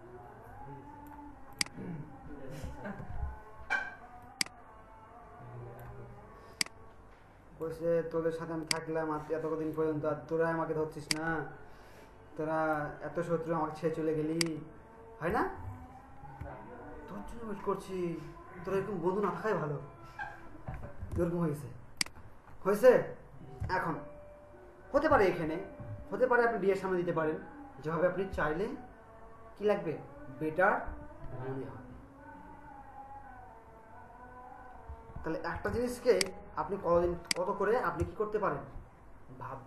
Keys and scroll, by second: 2.9 ctrl+z, 16.3 BackSpace, 21.1 ctrl+alt+space, 35.7 ctrl+alt+space.